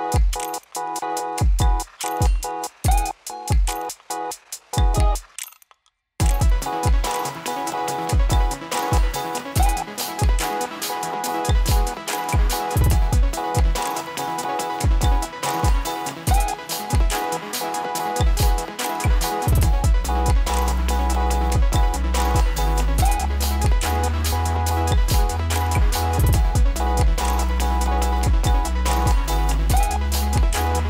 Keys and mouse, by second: 3.6 space, 5.9-13.4 drag, 13.8 F9, 16.1 click, 16.6 space, 22.4-30.8 drag.